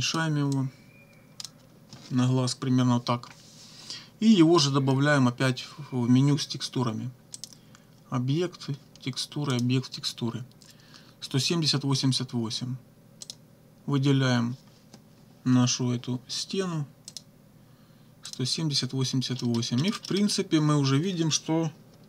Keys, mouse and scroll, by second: 0.6-1.6 drag, 7.4 click, 9.5 click, 13.3 click, 17.1 click, 18.3 click, 19.4 click, 20.0 click.